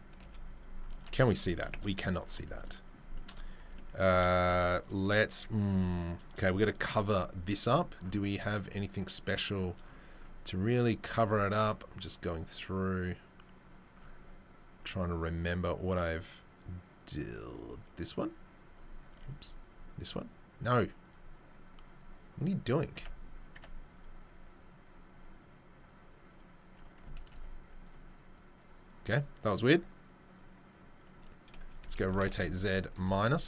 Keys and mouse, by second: 0.2 z, 0.9 Tab, 3.6 Tab, 5.8 2, 9.0-18.7 drag, 18.7 middle click, 19.1 Tab, 19.6-21.1 right drag, 21.1-22.2 middle drag, 22.2-26.5 right drag, 22.3 click, 22.9 Tab, 23.5 Tab, 23.9 click, 27.5 ctrl+s, 29.6-31.1 drag, 29.6-31.1 middle drag, 29.6-31.1 right drag, 31.8 r.